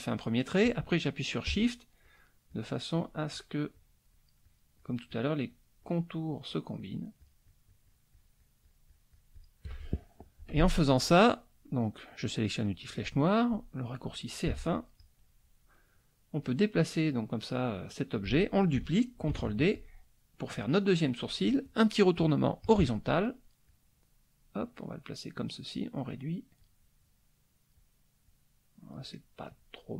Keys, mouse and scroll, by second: 2.0 shift+click, 2.5 shift+click, 2.9 shift+click, 3.3 shift+click, 3.7 shift+click, 5.5-7.1 shift+drag, 7.2-9.6 shift+drag, 12.5 click, 14.4 F1, 14.9-16.6 drag, 16.6 scroll up 1, 16.7 click, 17.3 scroll up 1, 17.5 click, 19.3 ctrl+d, 19.7-21.4 ctrl+drag, 22.6 click, 23.6-25.3 drag, 25.7 click, 26.6-27.9 drag, 28.2 click, 29.1 middle click.